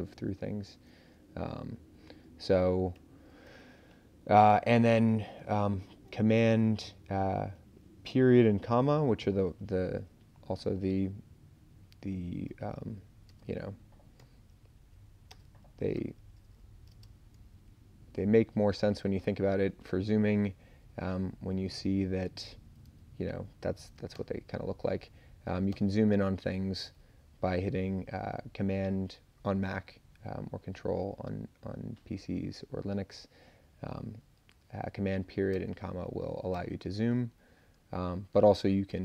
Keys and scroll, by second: 0.1 super+Down, 0.5 super+Up, 1.4 Down, 2.9 super+Up, 3.4 Up, 3.9 super+Down, 13.3 space, 14.2 shift+., 14.7 Left, 15.3 space, 15.9 <, 16.9 space, 17.7 Left, 18.0 Left, 18.8 Left, 24.1 super+., 25.7 super+., 35.5 super+,, 36.5 super+,, 38.9 super+z.